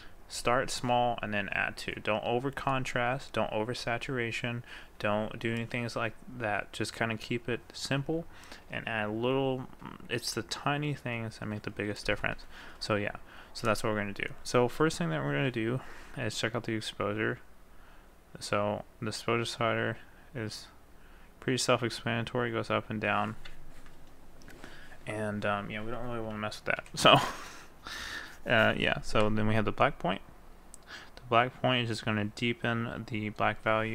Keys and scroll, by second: 26.8 ctrl+z.